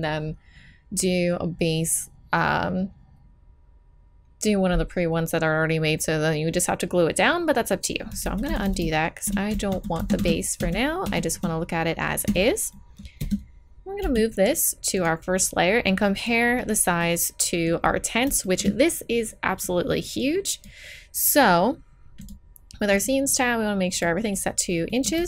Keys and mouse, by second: 8.2 ctrl+z, 8.4 ctrl+z, 8.6 ctrl+z, 8.8 ctrl+z, 9.7 ctrl+z, 10.0 ctrl+z, 10.1 ctrl+z, 10.6 ctrl+z, 11.0 ctrl+z, 12.2 a, 12.7-14.6 drag, 13.2 Tab, 14.0 m, 16.5 click, 17.9-19.3 middle drag, 19.3-22.2 right drag, 22.2-25.0 middle drag, 25.0-25.2 drag.